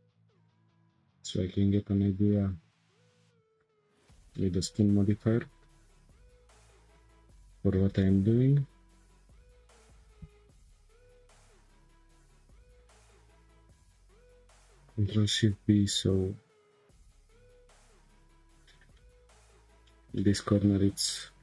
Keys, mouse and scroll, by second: 0.4-3.5 drag, 4.3-7.2 middle drag, 7.2-7.8 scroll up 2, 8.0-9.5 shift+middle drag, 9.5 Tab, 10.9-12.2 drag, 12.7 shift+click, 13.6 click, 14.7 ctrl+shift+b.